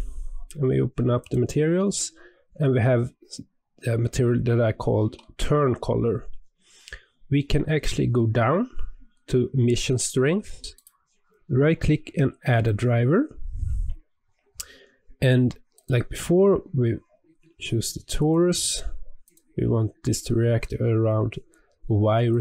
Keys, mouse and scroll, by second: 1.1 click, 7.2-10.6 scroll down 13, 10.6-22.4 right drag.